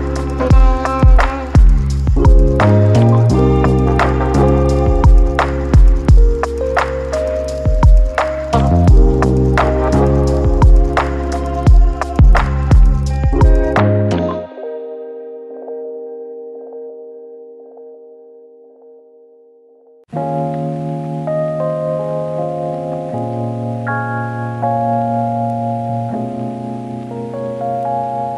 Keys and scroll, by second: 0.0 ctrl+d, 1.7 ctrl+d, 16.7-17.6 typing, 19.1 ctrl+d, 21.8-22.9 typing.